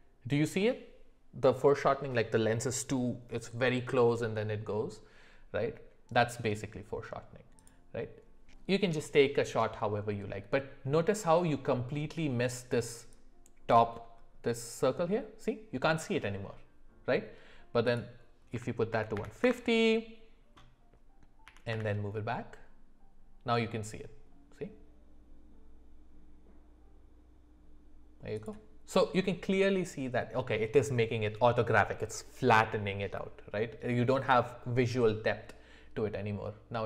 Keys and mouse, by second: 17.9-21.4 drag, 21.4 g.